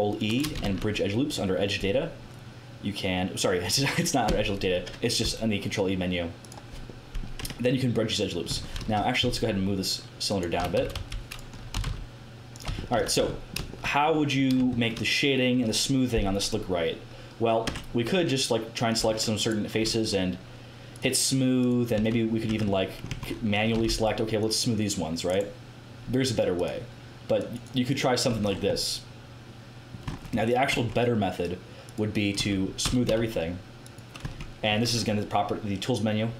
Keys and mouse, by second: 0.6 ctrl+w, 0.6 ctrl+e, 6.8 middle click, 7.4 Tab, 8.4 Tab, 8.7 KP_1, 10.5-12.9 typing, 13.1 Tab, 17.6 Tab, 18.8 click, 19.8-23.0 drag, 19.8 middle click, 19.8 right click, 21.0 middle click, 21.0 right click, 21.9 a, 22.3 middle click, 22.5 Tab, 23.1 Tab, 23.7 a, 23.8 c, 25.3-28.2 drag, 28.2 Tab, 28.2-29.9 middle drag, 30.0 Tab, 30.6 Tab, 31.8 middle click, 32.3 Tab, 32.8 a, 33.0 a, 34.2 Tab, 34.7 middle click.